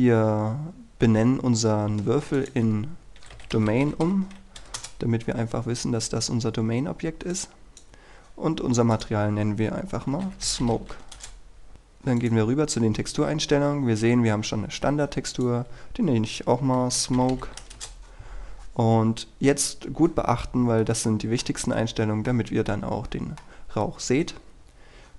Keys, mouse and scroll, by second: 2.5 ctrl+click, 3.3 ctrl+d, 3.7 typing, 4.9 Return, 7.4-8.9 drag, 10.0-11.4 typing, 12.3 click, 16.6-18.1 typing, 21.0 middle click.